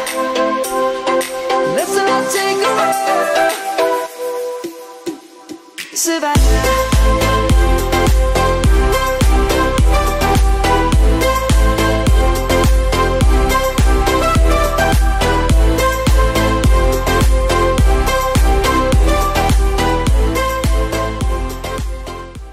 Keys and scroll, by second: 0.1 ctrl+z, 0.4 ctrl+z, 0.5 ctrl+z, 0.9 ctrl+z, 1.1 ctrl+z, 1.5 ctrl+s, 2.3 ctrl+z, 2.5 ctrl+z, 2.8 ctrl+z, 3.3 ctrl+z, 4.9 ctrl+z.